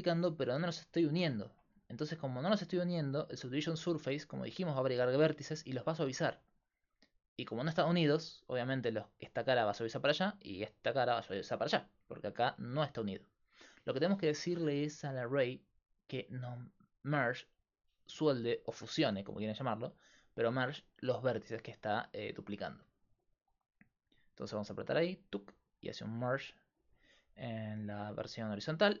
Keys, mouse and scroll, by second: 1.8 middle click, 2.5-4.7 middle drag, 25.5 click, 26.2 middle click, 27.6-29.0 alt+right drag.